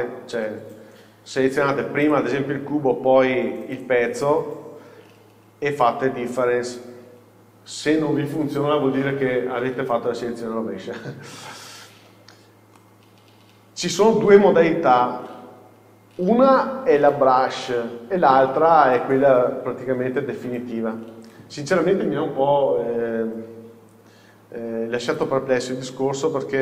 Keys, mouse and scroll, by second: 2.1 click, 3.8 shift+click, 6.4 click, 12.0-12.8 scroll down 1, 12.8-21.0 middle drag, 21.9-25.2 middle drag, 22.7-23.0 scroll up 1, 23.8-25.2 scroll down 2, 25.2 click.